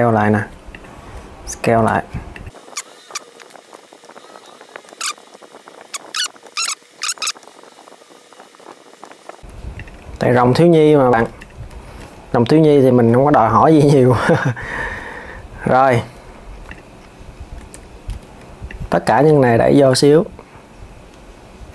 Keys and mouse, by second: 0.4 click, 0.8 s, 2.5 click, 2.7 alt+s, 2.9 click, 3.0 alt+s, 3.2-5.1 typing, 3.6 alt+s, 3.8 click, 4.1 alt+s, 4.2 alt+s, 4.6 click, 4.7 alt+s, 4.8 alt+s, 5.2 click, 5.4 alt+s, 5.5 alt+s, 5.8 click, 5.9 alt+s, 6.0 alt+s, 6.1 click, 6.7 click, 7.1 alt+s, 7.3 alt+s, 7.9-9.0 typing, 8.5 click, 9.1 click, 9.3 click, 9.8 alt+s, 10.7 alt+s, 11.0 Tab, 11.1 click, 11.5 s, 15.4 KP_1, 16.4 click, 17.3 Tab, 18.4 click, 19.6 click.